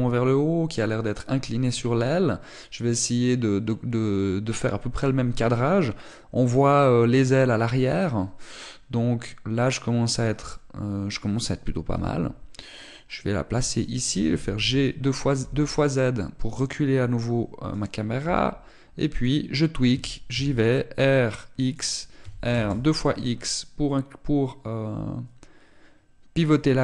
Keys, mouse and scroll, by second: 12.7 g, 14.9 click, 14.9 g, 18.5 click, 19.0 g, 19.9 click, 20.7 r, 22.5 click, 22.9 r.